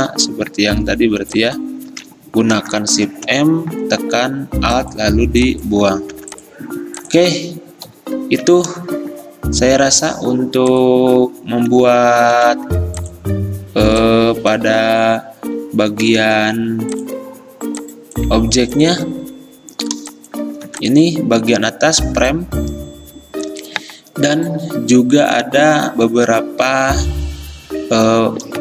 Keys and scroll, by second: 2.0 ctrl+z, 3.1 m, 6.2 v, 8.0 Delete, 12.4 a, 16.3 ctrl+z, 19.3 ctrl+z, 20.7 v.